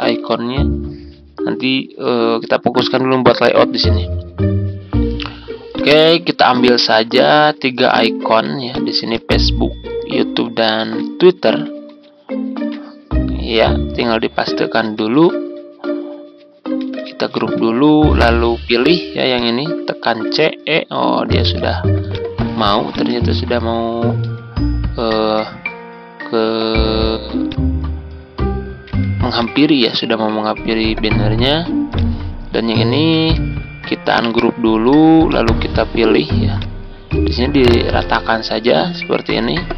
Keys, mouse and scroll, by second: 8.6 click, 10.8 ctrl+c, 11.6 Tab, 12.6 Tab, 14.9 ctrl+v, 17.3 ctrl+g, 19.3 shift+click, 20.2-20.6 typing, 21.4 click, 23.6 ctrl+click, 25.0-26.6 drag, 28.8 z, 29.3-30.6 drag, 33.2 ctrl+u, 35.6-37.6 drag, 38.9-39.4 ctrl+scroll up 1.